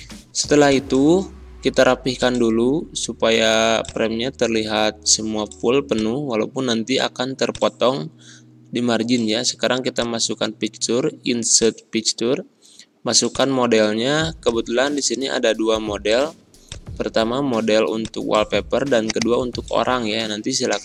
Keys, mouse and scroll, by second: 10.0 click, 16.6 click.